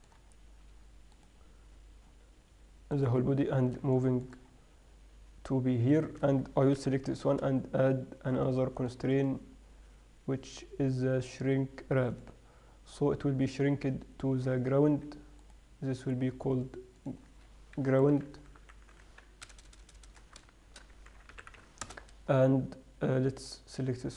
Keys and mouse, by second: 1.4-4.8 right drag, 6.2 right click, 7.0 ctrl+Up, 8.1 drag, 8.6-11.3 drag, 15.1 Escape, 15.7-16.8 drag, 19.9 BackSpace, 20.1 BackSpace, 20.3 BackSpace, 23.7 click.